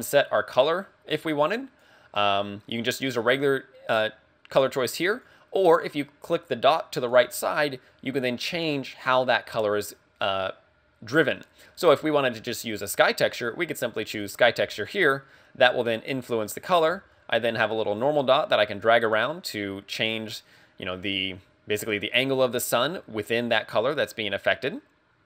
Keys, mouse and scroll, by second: 3.2 click, 7.0 click, 18.4 click.